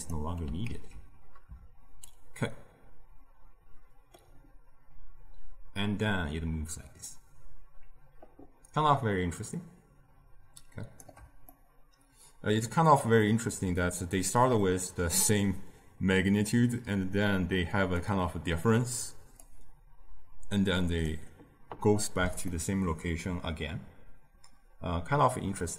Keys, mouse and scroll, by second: 0.6 ctrl+x, 2.0-5.1 shift+drag, 11.4-16.4 middle drag, 16.4-22.4 drag, 22.4-25.7 middle drag.